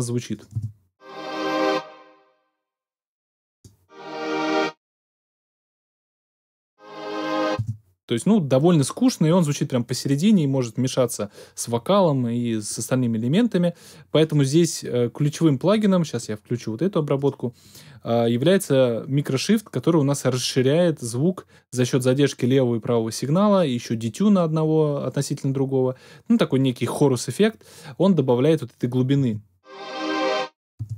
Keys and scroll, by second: 0.5 space, 7.5 space, 29.1 space, 30.7 space.